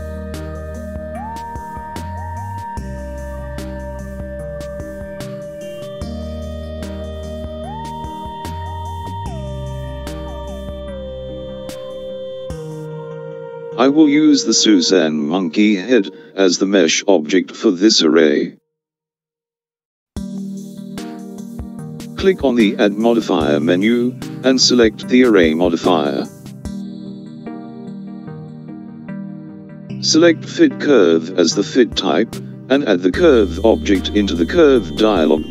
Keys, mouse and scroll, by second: 0.0 g, 10.1 KP_7, 14.6 Tab, 14.9 click, 24.2 click, 27.4 click, 34.6 click.